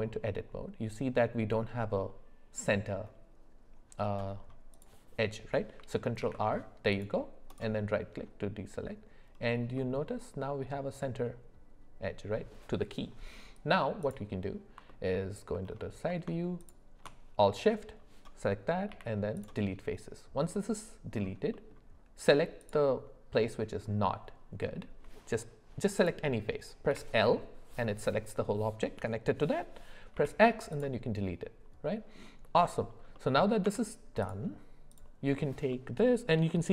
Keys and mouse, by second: 6.2 ctrl+r, 9.7-12.5 middle drag, 15.1 alt+middle click, 16.6 alt+shift+click, 18.9 x, 21.5 middle click, 26.0 click, 30.1 x, 31.8 middle click, 33.1 middle click, 33.6 Tab, 34.9 click, 35.7 middle click.